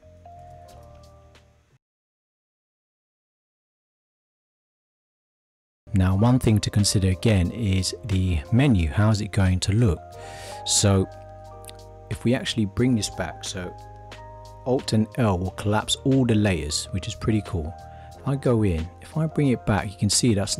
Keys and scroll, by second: 15.1 alt+l.